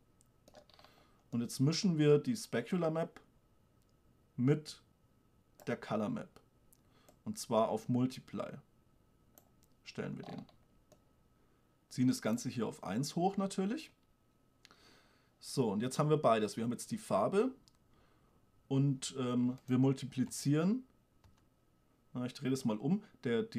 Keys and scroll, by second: 20.6 m.